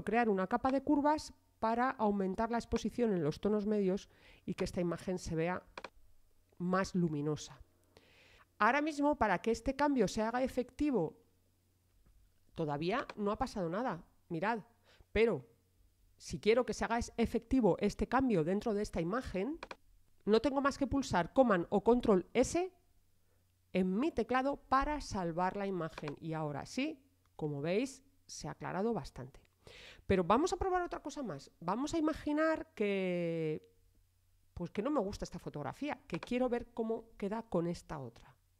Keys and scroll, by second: 21.9 super+s.